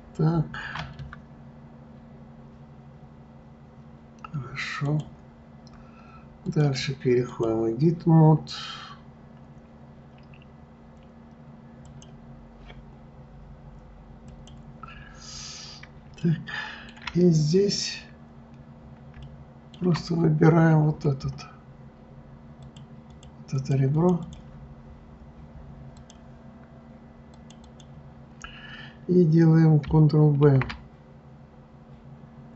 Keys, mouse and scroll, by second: 4.8 click, 5.6-6.4 scroll up 1, 6.4-9.5 drag, 11.8 click, 14.3 click, 15.4-16.2 scroll up 1, 16.2-17.3 shift+middle drag, 17.3 scroll up 1, 18.9-19.2 scroll up 6, 19.2-20.6 shift+middle drag, 20.6-22.5 scroll up 11, 22.5 click, 23.1 click, 23.5 click, 23.9 click, 24.2 click, 26.0 click, 27.3 click, 27.6 click, 30.4 ctrl+b.